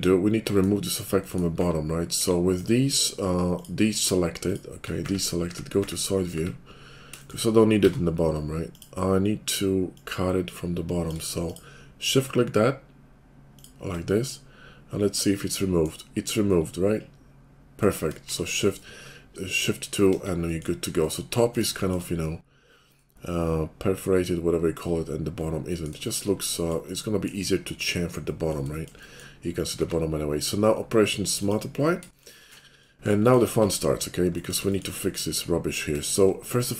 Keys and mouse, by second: 2.1 KP_5, 3.4 middle click, 3.6 click, 4.5 shift+middle click, 4.8-15.3 drag, 5.0 `, 5.5 `, 5.8 `, 6.3 `, 7.8 d, 9.8-13.7 middle drag, 9.8-13.7 right drag, 18.3 shift+2, 21.0 KP_5, 22.6-36.7 drag, 29.8 q, 33.6 Tab.